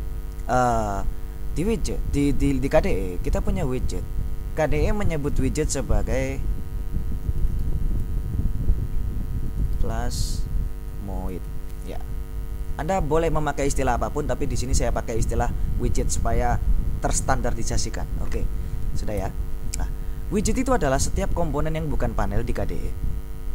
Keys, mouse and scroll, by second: 6.3 click, 7.2-8.3 typing, 9.3-12.1 typing, 19.3 ctrl+BackSpace.